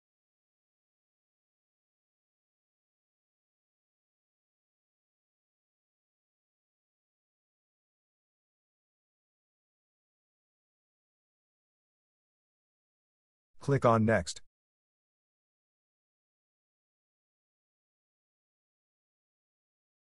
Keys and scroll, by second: 5.8 Return.